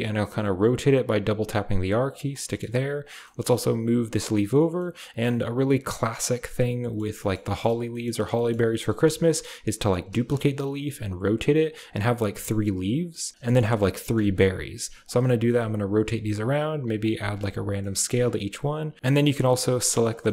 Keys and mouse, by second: 2.5 drag, 2.9 click, 3.2 shift+click, 3.7 g, 4.8 click, 5.4 g, 6.4-6.7 drag, 6.7 middle click, 7.2-7.6 shift+middle drag, 8.3 click, 9.0 shift+click, 9.2-10.7 typing, 9.3 click, 12.0 g, 13.7-19.6 typing, 18.1 click, 19.0 click.